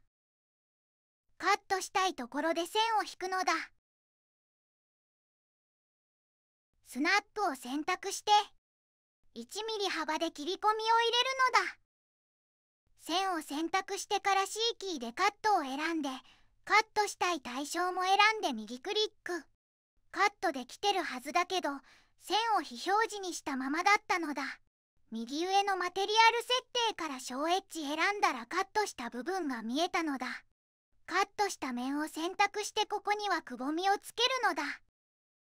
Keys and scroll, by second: 12.6 Escape, 12.6 c, 13.0 2, 14.6 c, 30.3 3, 34.8 -, 35.1 0, 35.2 ., 35.4 5.